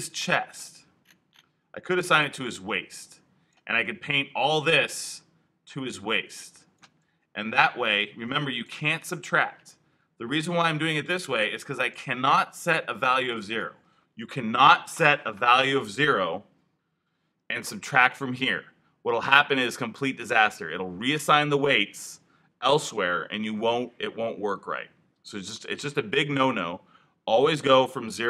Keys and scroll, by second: 17.0 0.